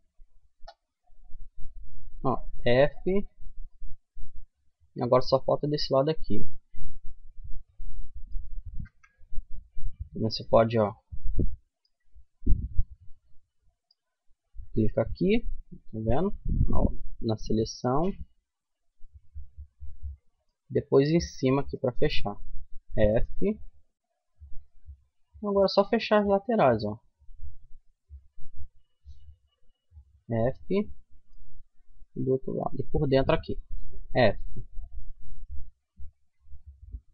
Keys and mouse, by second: 0.9 right click, 1.8 f, 2.3-5.0 middle drag, 5.6 middle click, 8.2 KP_Decimal, 10.0 middle click, 11.1 middle click, 12.0 middle click, 12.7-14.2 middle drag, 15.8 middle click, 18.0-19.4 middle drag, 21.8 f, 22.2 middle click, 23.0 middle click, 23.8 middle click, 24.6 middle click, 29.4 click, 29.4 f, 33.3 f, 36.7 f.